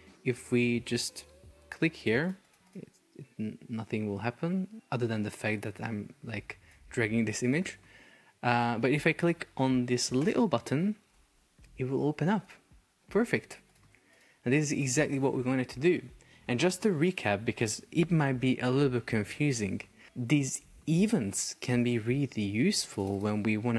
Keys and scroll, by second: 15.8 Escape.